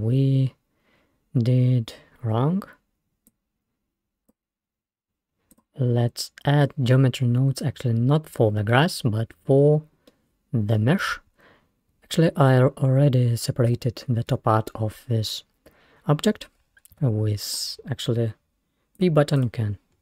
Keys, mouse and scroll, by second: 0.0-0.7 scroll, 3.3 click, 4.1-7.3 drag, 7.3 scroll down 2, 7.7-8.5 scroll up 1, 8.5 scroll down 1, 10.1-13.5 middle drag, 13.7 g, 17.0 Tab, 17.5 click, 19.1 click, 19.4 click.